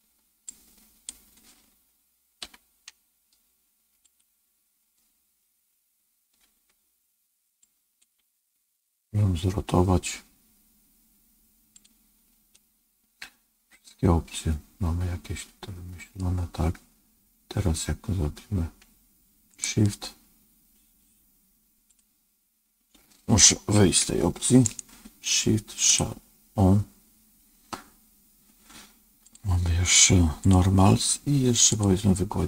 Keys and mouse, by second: 0.4 click, 2.4 i, 6.3 r, 7.6 click, 8.1 r, 12.5-16.1 middle drag, 19.4-20.5 right drag, 21.8 right click, 23.9 ctrl+Tab, 24.6-25.9 right drag, 29.2 click, 30.3 click, 31.6 click.